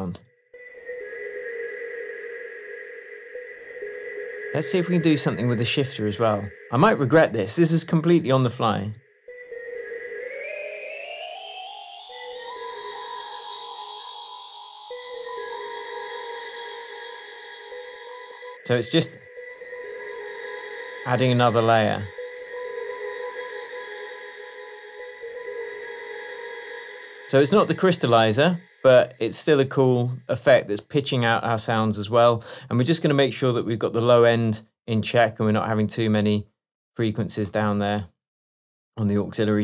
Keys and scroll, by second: 6.0 space, 9.0 space, 18.0 space, 19.1 space, 26.8 space, 37.7 space.